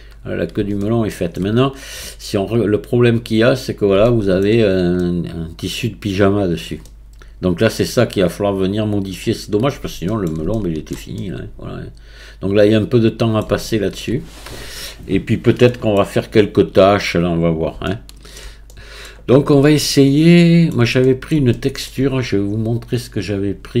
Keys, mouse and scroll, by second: 0.8-1.6 shift+middle drag, 1.6-3.0 scroll up 2, 3.0 click, 3.4-4.0 scroll up 1, 4.0-4.7 shift+middle drag, 4.7 scroll up 2, 5.0-9.2 middle drag, 9.2-10.1 scroll down 9, 10.1-14.3 shift+middle drag, 14.3-15.5 scroll up 2, 15.5 scroll up 1, 15.7-19.4 middle drag, 19.4-19.8 scroll up 3, 19.8-23.8 shift+middle drag.